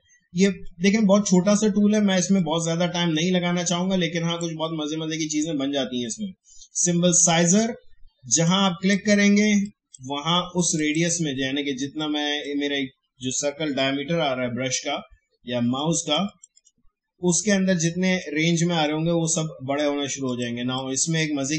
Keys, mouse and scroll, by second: 15.7-21.5 drag.